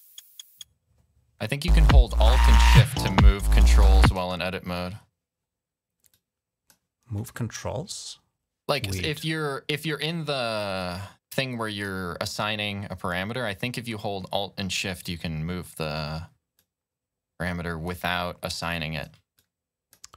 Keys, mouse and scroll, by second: 1.5 space, 2.8 space, 3.3 click, 4.0 space, 5.9 click, 11.1 click, 12.0 click, 16.3-17.7 alt+drag, 18.2 alt+click, 19.1 click.